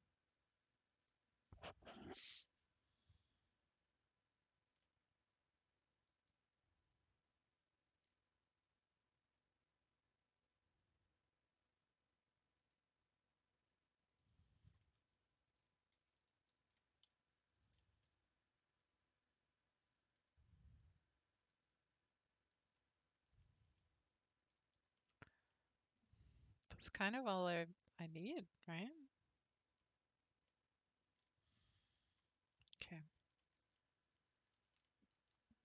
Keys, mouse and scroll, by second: 4.8-7.9 middle drag, 12.6-14.8 drag, 14.8-16.5 middle drag, 16.5 alt+click, 17.5 alt+click, 18.0-21.4 middle drag, 21.4-22.8 drag, 22.8-23.4 scroll down 3, 23.4-24.5 shift+middle drag, 24.5-25.0 scroll down 3, 25.0-27.6 shift+middle drag, 27.6-32.8 drag, 32.8 Tab.